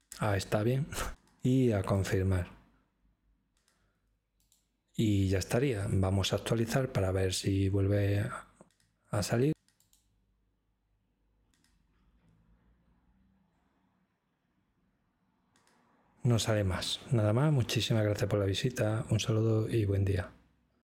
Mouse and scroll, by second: 2.0 click, 4.4-5.4 drag, 9.8 click.